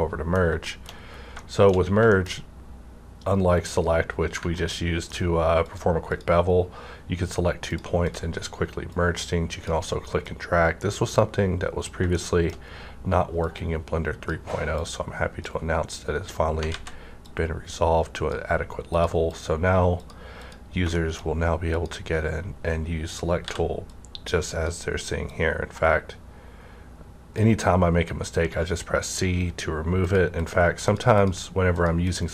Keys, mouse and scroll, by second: 0.6 shift+middle click, 0.9 scroll up 1, 1.4 middle click, 1.7 scroll down 1, 2.1 shift+middle click, 2.3 scroll up 1, 3.1 scroll down 1, 3.9 scroll up 1, 4.5 ctrl+middle click, 5.6-19.3 drag, 12.1 shift+middle click, 16.7 ctrl+z, 20.9 middle click, 21.7 click, 23.4 c, 23.9-29.7 drag, 30.0 click.